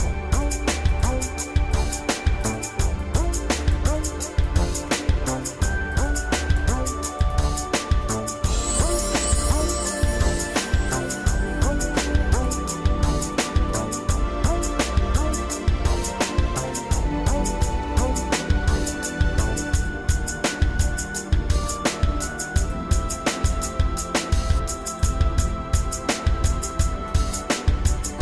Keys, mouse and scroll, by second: 1.0 click, 1.8 alt+shift+click, 3.1 alt+shift+click, 4.9 alt+shift+click, 6.0 alt+shift+click, 6.9 alt+shift+click, 7.5 alt+shift+click, 8.7 alt+shift+click, 10.0 shift+middle click, 11.1 ctrl+Tab, 12.4 click, 13.3 click, 13.8 shift+middle click, 14.6-16.4 shift+middle drag, 17.8 ctrl+KP_Add, 19.7 click, 24.0 click, 26.0 click, 27.9 shift+middle click.